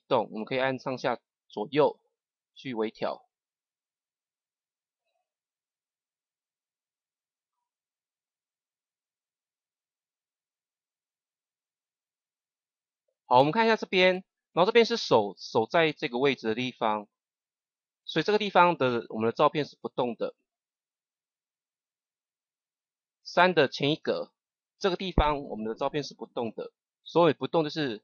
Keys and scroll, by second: 0.9 Right, 4.2 Left, 23.8 Page_Up.